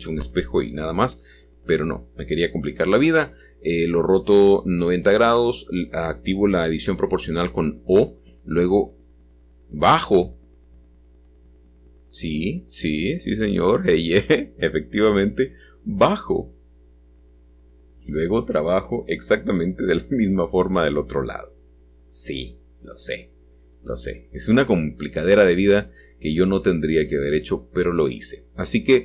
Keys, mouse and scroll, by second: 0.0 o, 8.5-9.2 scroll up 1, 9.2-10.5 scroll up 1, 10.7-11.8 drag, 12.1 g, 13.9 y, 15.3-17.4 scroll down 2, 19.0-20.1 drag, 20.7-22.4 drag, 27.4 c, 28.1-29.0 drag.